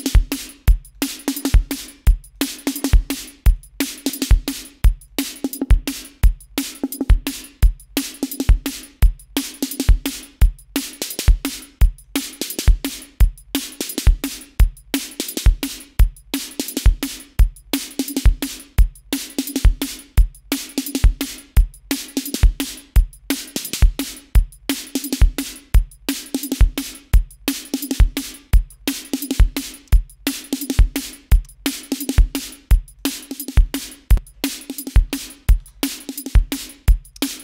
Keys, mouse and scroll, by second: 1.8-2.8 drag, 2.9-4.1 drag, 4.2 click, 5.4-9.4 drag, 10.2-12.5 drag, 13.5-15.8 drag, 16.1-17.8 scroll up 7, 17.8 scroll up 1, 18.8-19.1 scroll down 2, 20.2 scroll down 2, 22.5-22.9 scroll down 2, 23.3 scroll down 2, 23.9 scroll down 2, 24.3-25.1 scroll up 2, 25.3 scroll up 2, 25.7-26.0 scroll down 2, 29.7 click, 32.5 click, 33.6 click, 34.3 click, 35.0-36.3 typing.